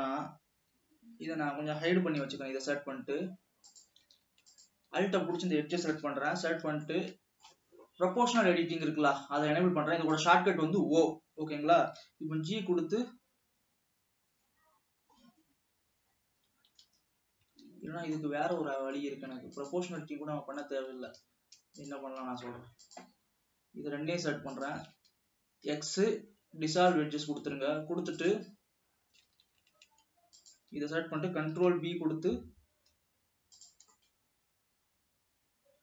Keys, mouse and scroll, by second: 2.5 h, 4.0 click, 4.4 alt+a, 4.7-5.2 alt+drag, 6.1 KP_3, 7.2 shift+middle click, 7.7-10.2 shift+scroll up 2, 10.4 click, 12.3 g, 17.8 alt+a, 18.5-19.8 middle drag, 19.8 drag, 20.4-21.3 middle drag, 21.3 alt+a, 22.2 click, 23.1 alt+shift+click, 24.7 alt+shift+click, 25.8 x, 28.6 click, 30.0 alt+a, 30.6-31.3 alt+drag, 31.8 ctrl+b, 34.2-35.8 middle drag.